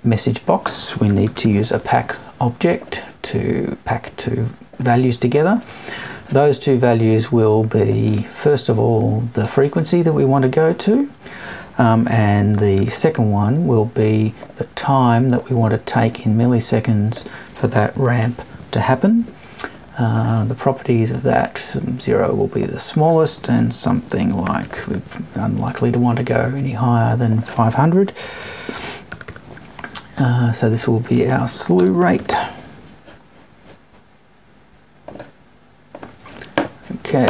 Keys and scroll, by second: 17.9 Left, 25.6 BackSpace.